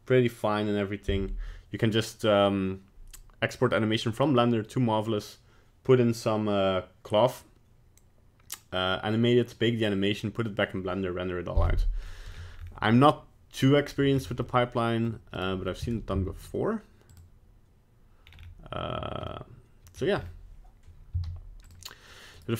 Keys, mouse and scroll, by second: 12.1 middle click, 12.6-14.1 scroll up 3, 14.2 scroll up 2, 14.4 middle click, 15.3 right click, 15.8 g, 18.3-19.3 scroll down 4, 19.3 middle click, 20.1 scroll up 4, 21.1 z, 22.3 right click.